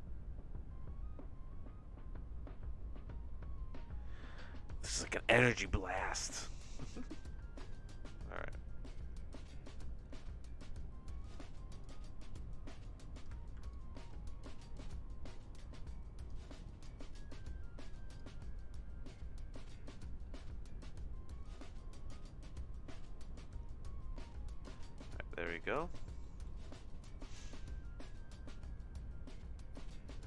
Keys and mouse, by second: 7.2 ctrl+x, 8.3-11.3 drag, 11.8-13.2 drag, 13.6 ctrl+z, 13.7-16.3 drag, 16.8-17.9 drag, 18.2-24.7 drag, 25.1 middle click, 26.2 middle click, 27.3 middle click, 29.9 middle click.